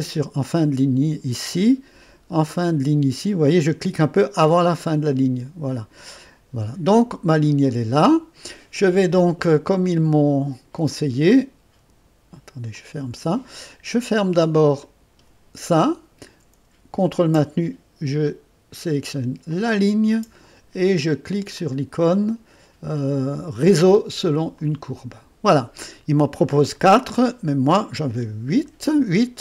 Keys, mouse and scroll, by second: 0.0 click, 5.7 click, 7.4-8.9 scroll down 1, 10.9-12.0 drag, 12.8 click, 14.8 click, 19.5 click, 21.5 click, 24.5 click, 27.4 click, 28.6 8.